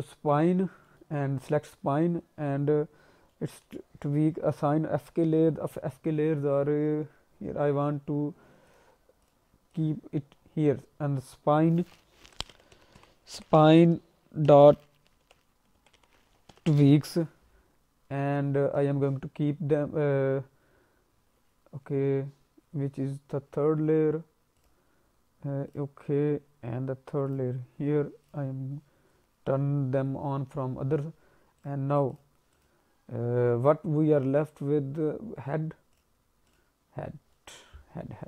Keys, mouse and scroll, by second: 0.7 scroll up 1, 0.8 middle click, 1.3 click, 3.3 alt+middle click, 8.7 click, 9.2 click, 9.7 click, 24.5 click, 25.7 click, 27.3 click, 28.2 click, 31.5 click, 32.1 click, 32.5 click, 34.7-35.5 scroll up 2, 35.9 click, 36.5 click, 37.2 scroll down 1, 37.3 middle click, 37.8-38.2 scroll up 3.